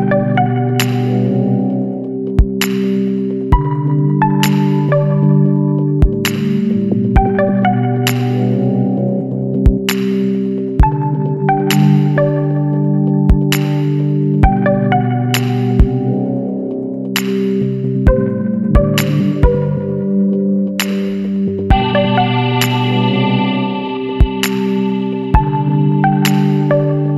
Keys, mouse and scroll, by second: 0.6 click, 1.6 KP_6, 3.7 click, 4.6 KP_1, 5.4 KP_Decimal, 5.6 KP_5, 7.5 click, 8.8 click, 10.4 middle click, 10.8-13.3 drag, 13.5 scroll up 2, 15.7 click, 16.1 Right, 16.8 scroll up 2, 17.4 Up, 18.0 Right, 18.7 Up, 19.3-19.7 scroll up 2, 20.5 scroll down 2, 23.5 click, 25.0 click.